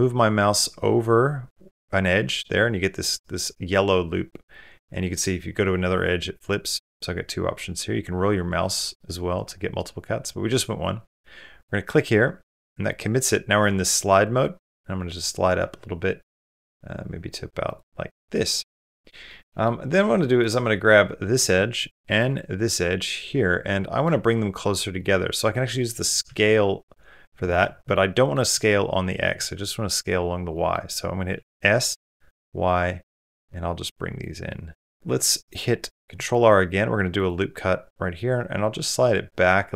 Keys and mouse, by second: 18.3 middle click, 18.9 middle click, 19.3 middle click, 20.2 click, 20.7 middle click, 22.0 middle click, 22.8-23.8 middle drag, 24.8 middle click, 25.6 middle click, 26.1 s, 27.7 middle click, 28.3 s, 30.3 middle click, 31.1 s, 34.3 middle click, 35.8 ctrl+r.